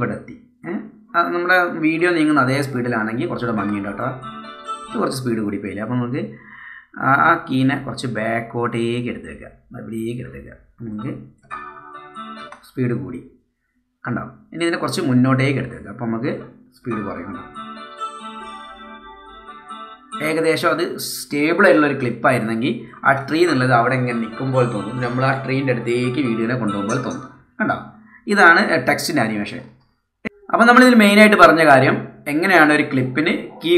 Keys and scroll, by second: 3.5 space, 5.0 space, 11.6 space, 16.9 space, 20.3 space, 23.5 space, 27.3 space.